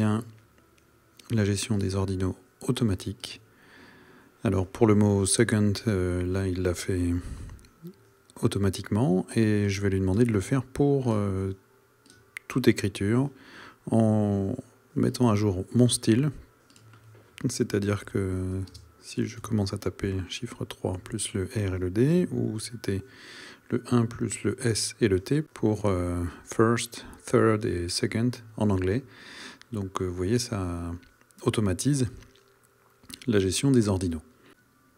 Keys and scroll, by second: 18.7 space, 19.4 KP_3, 20.4 r, 22.1 KP_Decimal, 22.7 KP_1, 24.0 s, 24.6 t.